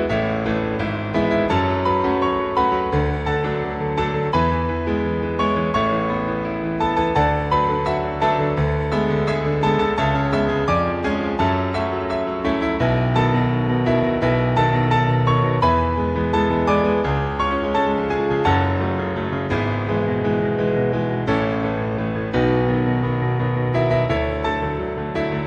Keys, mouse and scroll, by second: 1.1 z, 1.7 ctrl+click, 2.9-3.6 scroll up 5, 4.3-4.6 scroll up 1, 4.6 ctrl+click, 6.3-6.8 scroll up 2, 6.8 scroll down 1, 7.1 right click, 10.1 ctrl+Tab, 10.6 click, 10.9 z, 11.8 shift+middle click, 12.7 scroll down 1, 13.0 click, 14.3 click, 16.0 click, 20.5-21.2 scroll down 3, 21.3 shift+middle click, 22.9 click, 23.4 shift+middle click, 24.5 click.